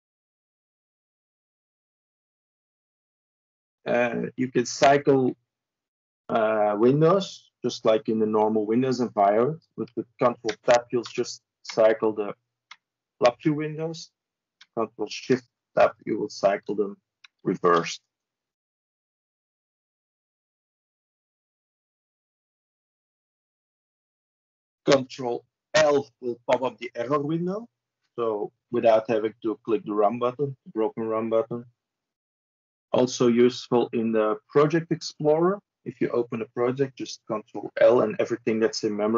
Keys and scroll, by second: 10.3 ctrl+Tab, 11.0 ctrl+Tab, 11.5 ctrl+Tab, 12.5 ctrl+Tab, 15.3 ctrl+shift+Tab, 15.8 ctrl+shift+Tab, 16.2 ctrl+shift+Tab, 17.1 ctrl+shift+Tab, 25.6 ctrl+l.